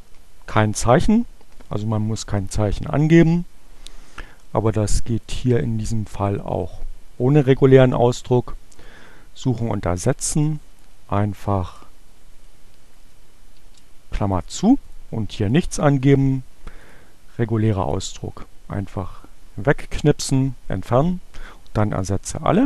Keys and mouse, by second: 5.0 click, 8.8 click, 13.7 shift+9, 14.9 click, 16.1 click, 16.8 click, 21.5 click.